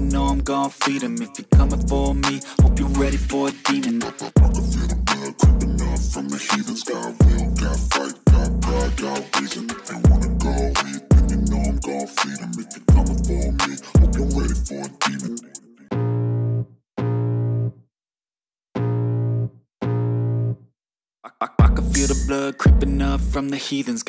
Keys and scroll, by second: 17.3 v.